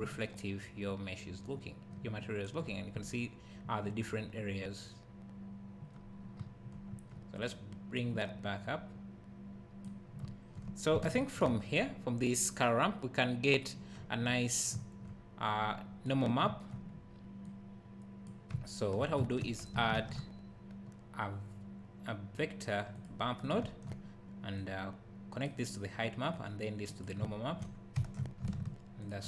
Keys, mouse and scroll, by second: 15.5 click, 17.5 click, 24.6-29.2 drag, 27.2 `.